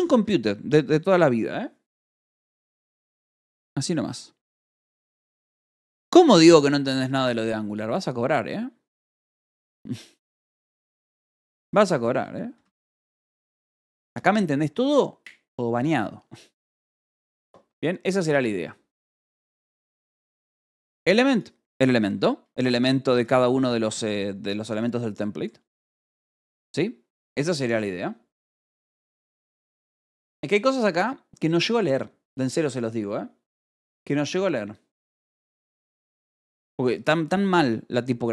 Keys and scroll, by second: 0.9 ctrl+shift+s, 11.6-14.0 typing, 11.8 Escape.